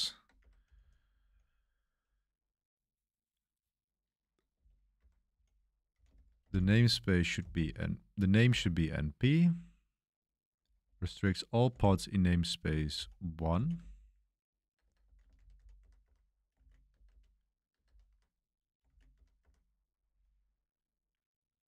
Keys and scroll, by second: 0.4-1.7 typing, 3.0-9.3 typing, 10.6-11.7 typing, 12.9-17.8 typing, 18.8-21.6 typing.